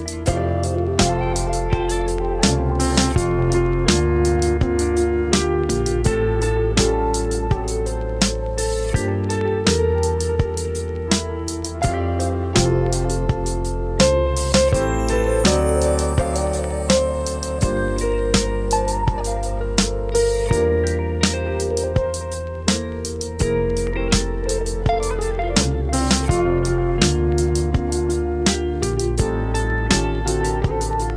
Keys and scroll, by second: 21.2 super+Tab.